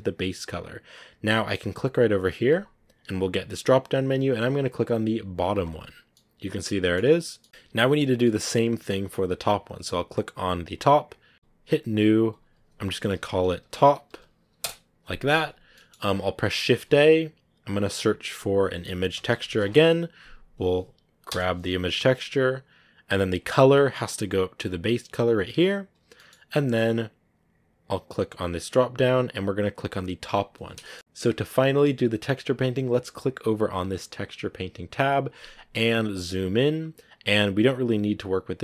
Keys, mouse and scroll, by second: 6.0 middle click, 6.9 scroll up 2, 7.3 middle click, 7.9 scroll down 2, 8.1-9.1 middle drag, 10.7 right click, 11.3-13.4 drag, 14.5 click, 25.3-27.2 drag, 25.3-27.2 right drag, 30.3 click, 31.0-34.0 shift+middle drag, 34.0-35.7 drag, 35.7-36.8 scroll up 9, 38.4-38.6 drag.